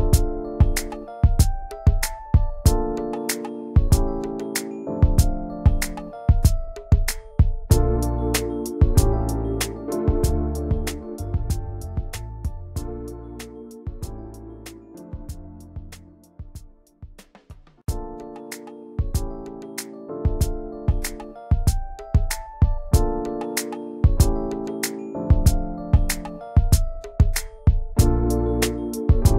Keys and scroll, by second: 4.5 g, 5.4 m, 6.3 m, 7.8 v, 9.7 ctrl+[, 10.7 ctrl+], 11.9 v, 12.7 alt+Right, 13.5 Left, 13.5 Down, 13.7 Left, 13.7 Down, 13.9 Left, 14.4 alt+Right, 14.5 Left, 14.9 Up, 15.1 Left, 16.8 i, 18.0-19.2 typing, 20.0 ctrl+g, 22.0 ctrl+shift+], 22.4 ctrl+g, 25.9 ctrl+g.